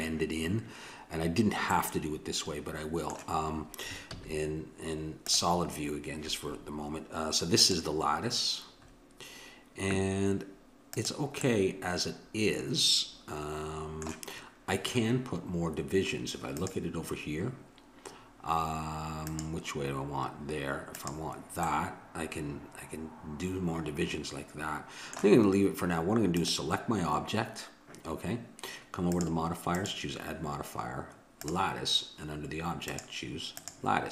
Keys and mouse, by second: 1.8-3.5 middle drag, 4.1 z, 7.6-9.4 drag, 9.4-10.9 middle drag, 10.9-12.8 drag, 12.8 middle click, 16.6-18.4 drag, 19.3-22.8 drag, 22.8 middle click, 26.3-28.2 drag, 29.1-31.5 drag, 32.9-34.1 drag.